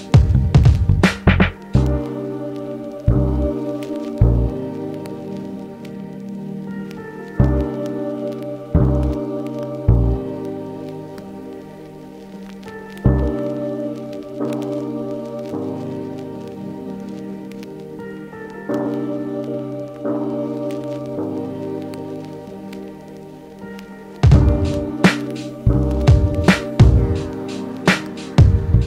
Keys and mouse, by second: 3.9-4.3 middle drag, 4.3-24.6 drag, 12.1 w, 18.1 typing, 21.2 r, 24.6-28.5 middle drag, 25.9 ctrl+Tab, 28.5-28.8 drag.